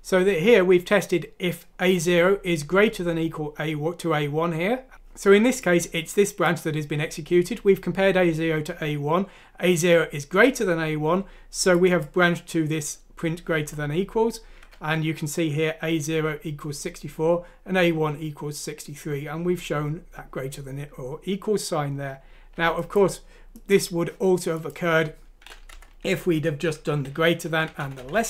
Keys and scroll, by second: 25.7 Home, 27.0-27.7 typing, 27.2 Down, 27.4 Left, 27.8 Up, 28.0 Up, 28.1 Up.